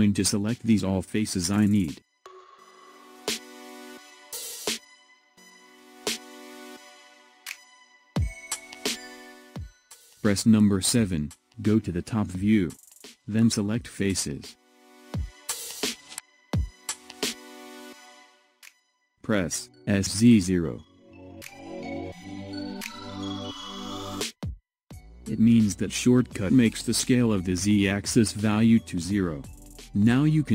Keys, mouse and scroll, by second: 0.6-3.6 middle drag, 4.4 click, 5.8 click, 8.1 click, 11.0 KP_7, 12.8 click, 15.7-18.7 middle drag, 20.9 s, 26.1-28.3 middle drag, 28.3-29.0 scroll up 1, 29.0 click, 29.6 scroll down 2, 30.3 scroll down 2.